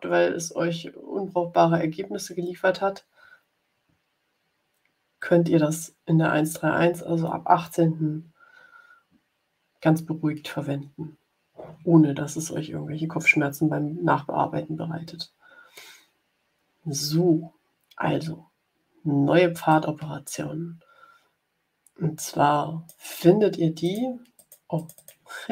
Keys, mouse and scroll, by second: 19.6-23.0 drag, 23.7 click, 24.3 click.